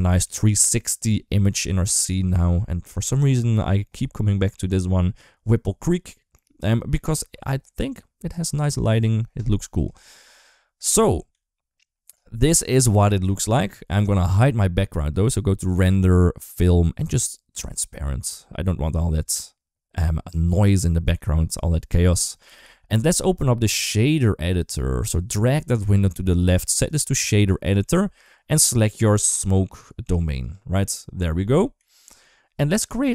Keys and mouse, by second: 0.1-2.4 middle drag, 3.7-6.1 middle drag, 7.4-8.5 middle drag, 9.5 KP_0, 11.1 KP_3, 12.6 middle click, 12.7 middle click, 14.9 click, 16.2 click, 17.5 click, 18.3 middle click, 22.9 ctrl+s, 24.1-26.4 drag, 26.7-27.6 drag, 29.0 click, 30.2 click, 31.6 KP_1, 32.0 KP_3, 32.8 shift+middle drag.